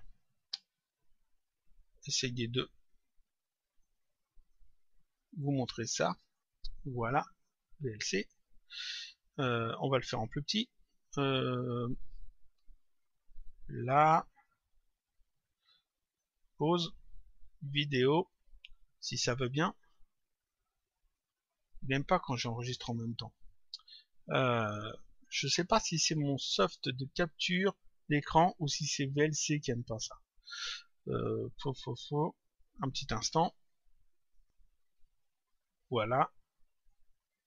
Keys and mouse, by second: 0.9 click, 4.4 click, 10.8 click, 13.2 click, 16.0 click, 17.6 click, 34.2 click.